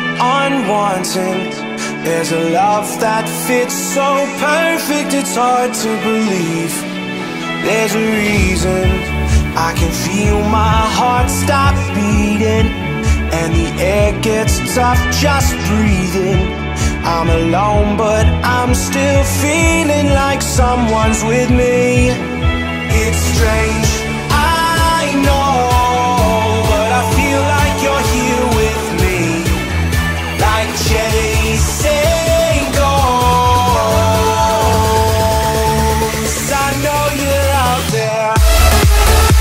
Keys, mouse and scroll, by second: 0.2 right click, 0.9 click, 2.2 middle click, 2.2 middle click, 2.7 scroll up 1, 3.7-6.2 typing, 3.8 click, 5.9 click, 7.0-7.6 scroll up 1, 8.2 p, 8.4 click, 9.8 space, 9.9 scroll down 1, 10.3 middle click, 11.2-12.2 scroll up 1, 12.2 p, 12.3 click, 13.2 space, 13.4-13.9 scroll down 1, 13.9 middle click, 14.4 click, 15.2-15.7 scroll up 1, 16.1-17.9 shift+middle drag, 17.9 m, 18.7 ctrl+click, 20.1 Up, 20.9-22.5 shift+middle drag, 22.5 click, 22.7 space, 22.8 scroll down 1, 23.5 middle click, 24.0-24.4 scroll up 1, 25.3 p, 25.6 click, 25.9 scroll down 1, 28.0 click, 28.2 space, 28.4 middle click, 28.8-29.2 scroll up 1, 30.0 p, 30.9 click, 32.5 space, 32.7 scroll up 1, 32.9 middle click, 33.3-33.6 scroll up 1, 33.9 middle click, 35.4 p, 35.7 click, 36.6 3, 37.2 Return, 37.5 space, 37.6-37.9 scroll down 1, 38.6 click, 39.2-39.4 scroll up 1.